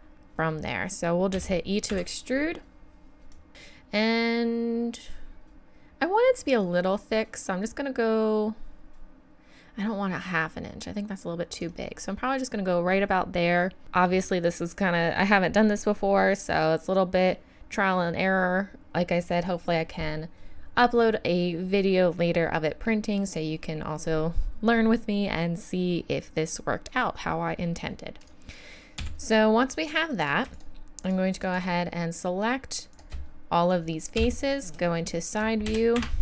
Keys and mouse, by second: 1.3 e, 3.3-4.9 drag, 28.2 click, 29.0 z, 29.8 click, 30.5-32.4 drag, 32.9 click, 34.2 KP_3, 34.8 middle click, 35.0 right click, 35.7 e.